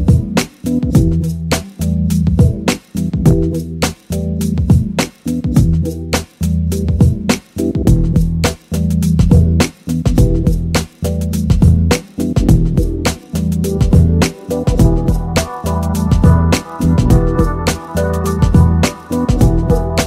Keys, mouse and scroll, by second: 2.6-4.4 middle drag, 4.4 KP_3, 7.8 r, 9.3-10.4 drag, 10.4 middle click, 12.0 KP_7, 13.0 r, 15.6 middle click, 17.9 KP_7.